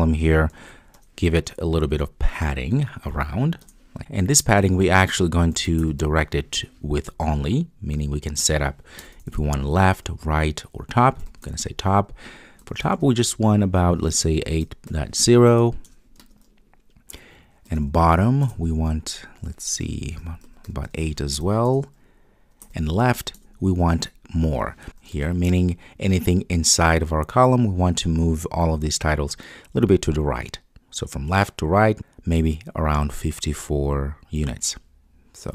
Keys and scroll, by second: 3.6 alt+Return, 18.4 Return, 23.4 Return.